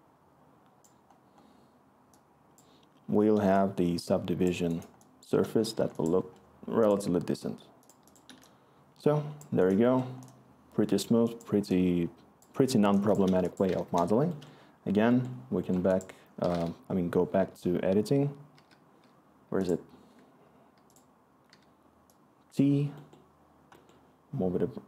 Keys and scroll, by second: 3.8-4.3 scroll, 13.8 Return, 18.0-18.5 typing, 21.4 typing, 24.7 t.